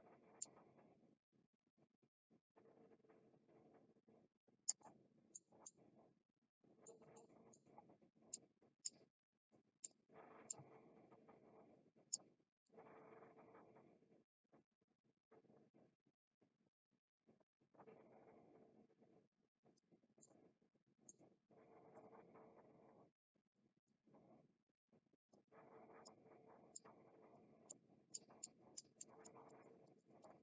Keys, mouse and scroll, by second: 0.3-4.7 drag, 4.8 middle click, 5.6-6.8 middle drag, 7.2 middle click, 8.3 click, 10.4-12.1 drag, 12.5-19.7 drag, 20.2 middle click, 21.9 click, 23.5 click, 25.2 click, 26.7 click, 27.6 click, 28.4 click, 29.0 click, 29.4 click, 29.8 click, 30.2 middle click.